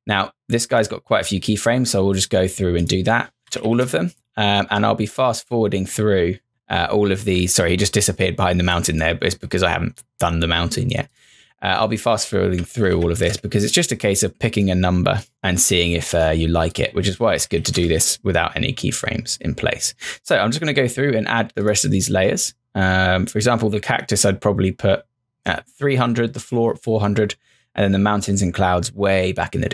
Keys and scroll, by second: 3.2-4.2 typing, 12.2-13.4 typing, 17.1-18.1 typing.